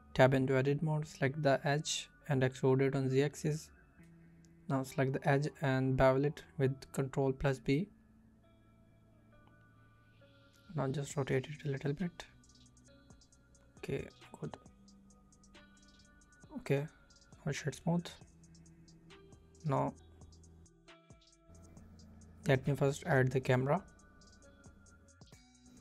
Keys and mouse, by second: 0.2 2, 0.9 e, 2.1 shift+middle click, 4.0 click, 4.4 ctrl+b, 7.1 click, 8.1 Tab, 9.2 KP_7, 10.1 r, 13.6 click, 14.3 g, 14.9-17.1 middle drag, 17.4-18.8 middle drag, 19.6 click, 19.8 click, 20.8 click, 21.5 click, 22.2 shift+a.